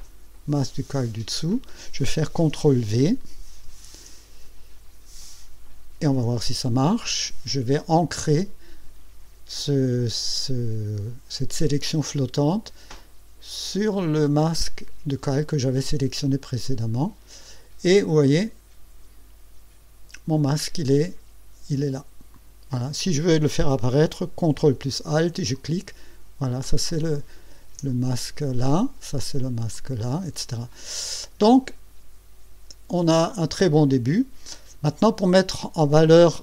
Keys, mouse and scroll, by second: 3.6 ctrl+v, 16.6 click, 22.3 click, 25.5 ctrl+alt+click, 26.9 ctrl+alt+click, 29.2 ctrl+alt+click, 29.7 ctrl+alt+click.